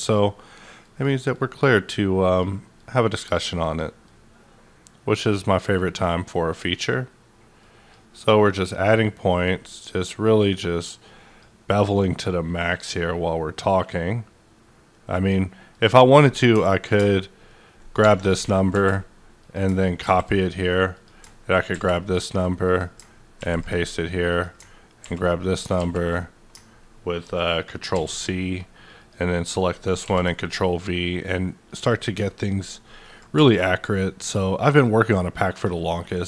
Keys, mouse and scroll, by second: 0.8 click, 1.3-4.0 drag, 4.0-6.0 drag, 6.0-8.1 drag, 8.1-16.9 drag, 16.9 click, 18.7 c, 19.4 click, 20.0 ctrl+v, 20.9 click, 21.7 ctrl+c, 22.6 click, 23.3 ctrl+v, 24.3 click, 25.0 ctrl+v, 25.7 ctrl+z, 27.9 ctrl+c, 28.9 click, 30.0 ctrl+v, 31.7 click.